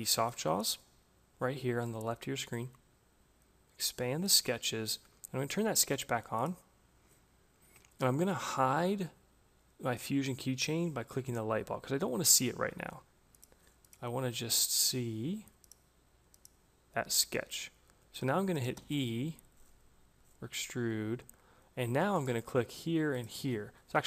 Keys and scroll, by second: 18.1 e.